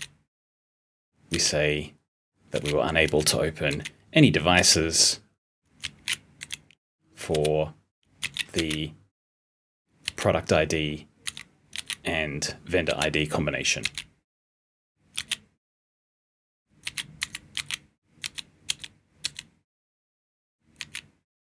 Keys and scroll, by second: 0.0-1.2 typing, 2.4 l, 3.0 o, 4.5 u, 11.2 *, 17.1 *, 20.7 p.